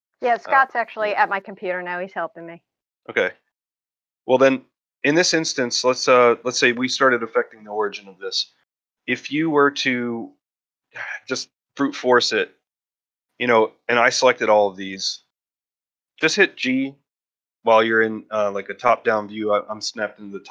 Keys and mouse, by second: 0.2-0.7 shift+middle drag, 0.8 middle click, 1.4 shift+middle drag, 1.7 ctrl+middle drag, 2.0 middle drag, 2.3-3.1 middle drag, 3.2 shift+middle drag, 3.5 ctrl+middle drag, 3.7 shift+middle drag, 4.6 shift+middle drag, 5.3-5.7 ctrl+shift+middle drag, 11.1 click, 11.6 ctrl+middle drag, 13.0-13.4 shift+middle drag, 15.1-15.4 shift+middle drag.